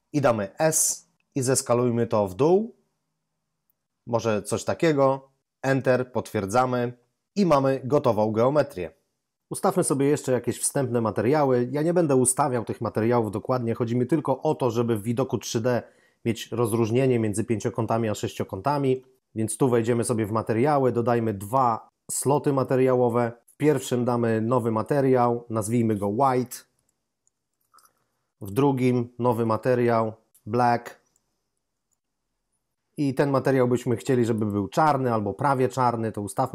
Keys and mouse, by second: 0.6 s, 7.3 a, 7.9 a, 18.7 ctrl+Up, 22.1 click, 22.5 double click, 23.4 click, 25.2 ctrl+click, 26.5-27.5 typing, 28.3 click, 29.5-31.8 typing, 29.7 shift+click, 34.3 click.